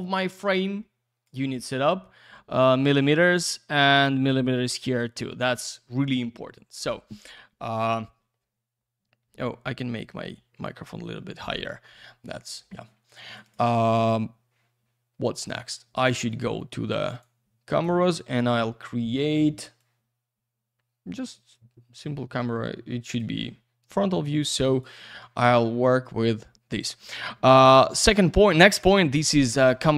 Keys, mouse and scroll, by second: 3.3 click, 4.9 click, 5.5 click, 13.1 click, 13.3 click, 13.4 click, 13.5 double click, 13.6 click, 15.4 click, 16.0 click, 16.3 click, 16.4 double click, 17.1 click, 17.7 click, 18.2 middle click, 19.2 middle click, 19.8 click, 24.7 click.